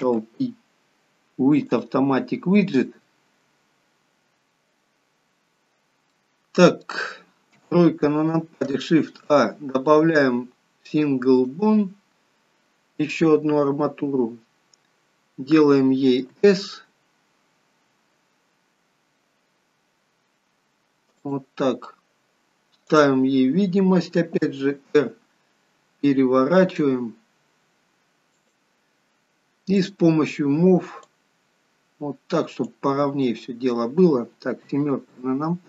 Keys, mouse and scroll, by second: 0.1 ctrl+p, 4.3-6.0 scroll down 1, 6.2 middle click, 7.5 KP_3, 9.1 shift+a, 23.0 click, 24.5 r, 29.8 click, 31.0 click, 33.3 middle click, 34.6 KP_7.